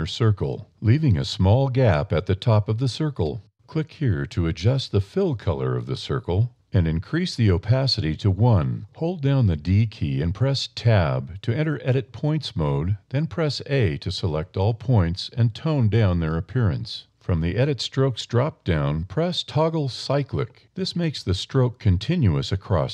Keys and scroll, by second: 9.0 a, 9.5 d, 10.1 Tab, 11.8 a, 20.0 a, 21.3 a, 22.8 a.